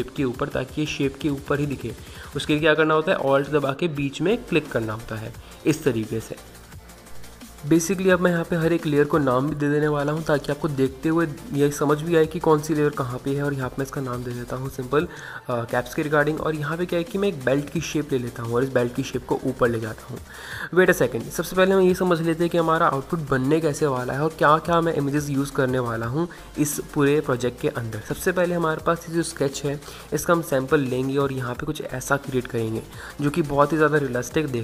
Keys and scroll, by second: 9.9-10.5 typing, 12.6-13.3 typing.